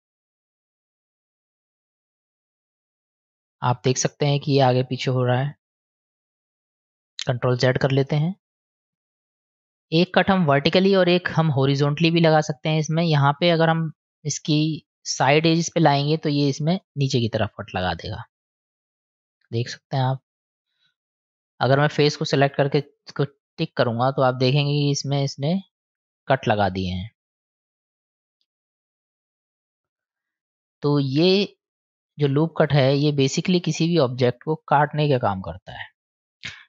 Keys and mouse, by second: 6.6 click, 8.6 ctrl+z, 8.9 ctrl+z, 11.6 middle click, 16.8 click, 18.1-21.2 middle drag, 23.2 click, 24.0 click, 24.7 click, 25.3 click, 26.0 click, 26.8-27.7 middle drag, 29.2 click, 29.5 click, 30.1 middle click, 31.3 middle click, 32.9-33.3 drag, 36.5 ctrl+z.